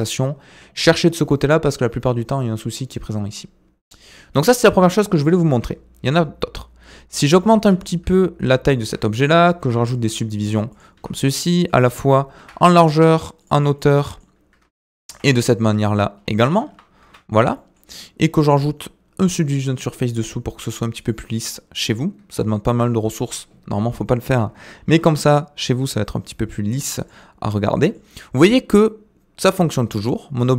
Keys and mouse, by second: 1.2-3.0 drag, 4.6-5.2 middle drag, 5.5 Tab, 7.2 middle click, 7.6 s, 9.6 ctrl+r, 11.2 middle click, 12.3 ctrl+r, 13.8 middle click, 15.1 ctrl+r, 17.0 Tab, 17.5 middle drag, 20.6 right click, 21.5-21.9 middle drag, 22.3-22.7 shift+middle drag, 24.9 g, 27.7 g.